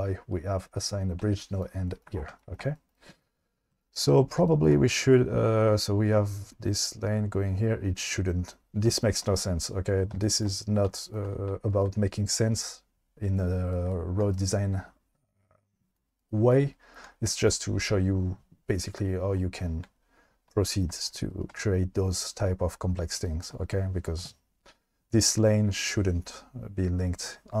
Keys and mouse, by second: 1.2 shift+middle click.